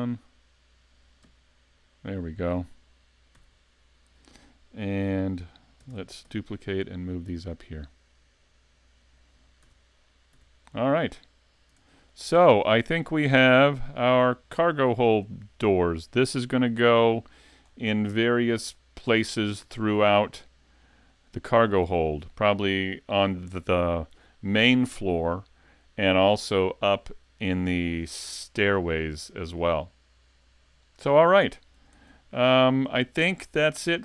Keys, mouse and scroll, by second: 1.2 KP_5, 3.3 z, 5.8 shift+d, 9.1 click, 9.7 a, 10.0 scroll down 3, 10.3 z, 10.7 middle click, 11.8 s, 12.4-12.8 scroll up 2, 12.8 shift+middle click, 13.7 KP_5, 14.5 middle click, 16.9-18.5 scroll down 12, 18.5 shift+middle click, 19.3 scroll up 4, 19.7 shift+middle click, 20.3 middle click, 21.9 shift+middle click, 31.9 s, 33.5 middle click.